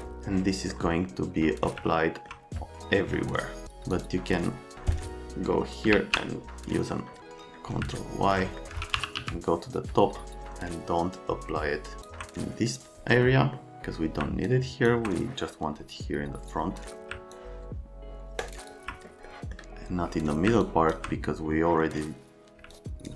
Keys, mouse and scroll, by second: 0.7 right click, 1.9 alt+middle click, 3.9 click, 4.7 middle click, 5.9 ctrl+i, 7.9 alt+middle click, 8.7-9.6 typing, 12.0 alt+click, 12.4 right click, 13.5 right click, 14.5 alt+click, 17.3 alt+click, 18.4 alt+scroll, 18.5 alt+click, 19.2 middle click, 20.6 alt+click, 21.5 middle click, 22.7 alt+click.